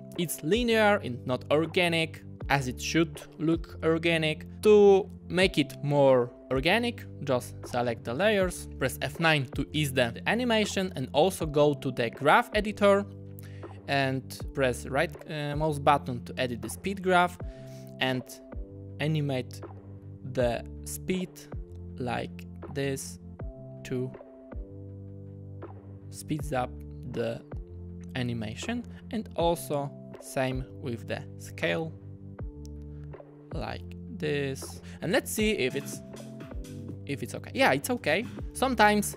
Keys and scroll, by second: 34.8 super+z, 35.5 space, 38.0 space.